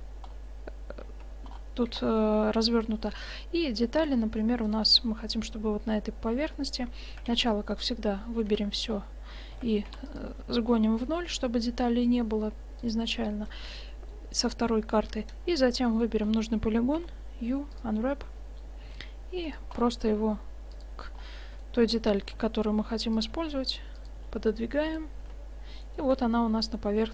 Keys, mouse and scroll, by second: 1.1 Tab, 3.0 Tab, 4.7-5.9 middle drag, 6.0 right click, 6.3 click, 7.2 a, 7.3 a, 8.6 a, 9.6 s, 11.1 g, 13.6 right click, 13.7-15.4 drag, 14.0-15.4 right drag, 15.4 middle click, 15.9 middle click, 17.1 u, 18.9 s, 20.0 g, 22.3 g, 23.4 s, 24.2 g, 25.3 Tab, 25.6-26.1 middle drag, 26.2 shift+z.